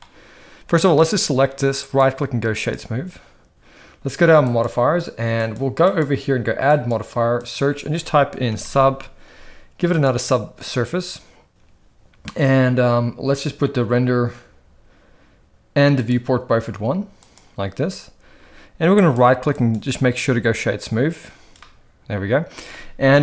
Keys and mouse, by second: 0.9 click, 1.9-4.4 right drag, 5.5 click, 6.8-10.9 drag, 16.0 click, 17.3 click, 18.9-20.1 right drag, 22.1-22.4 middle drag, 23.1 KP_1.